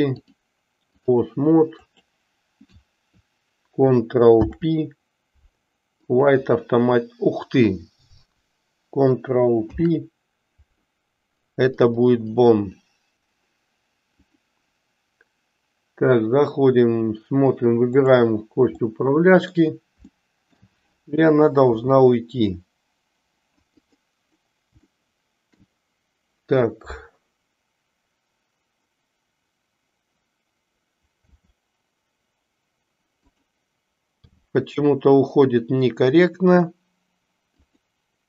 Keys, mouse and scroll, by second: 0.3 click, 1.8 click, 4.3 ctrl+p, 9.5 ctrl+p, 14.3-17.1 drag, 18.8 middle click, 20.2 shift+middle click, 21.7 g, 24.9-25.5 shift+middle drag, 31.3 r, 34.2 g.